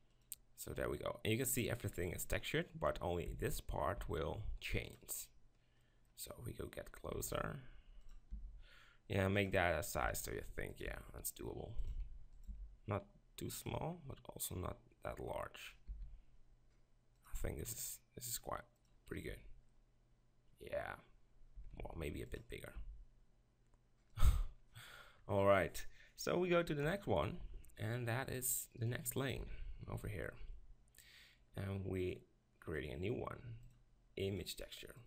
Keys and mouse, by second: 0.0-1.4 drag, 4.0 d, 4.0 s, 5.1-7.2 drag, 7.2 s, 8.3 g, 10.1 s, 10.9 g, 11.9-13.6 drag, 11.9 s, 12.5 g, 15.9 s, 17.4 g, 19.1 middle click, 19.3 Tab, 19.8-20.3 middle drag, 20.4 middle click, 21.6 Tab, 21.8 s, 22.8 g, 26.8 KP_7, 28.4-30.9 drag, 29.4 z, 29.9 b, 32.1-35.0 drag.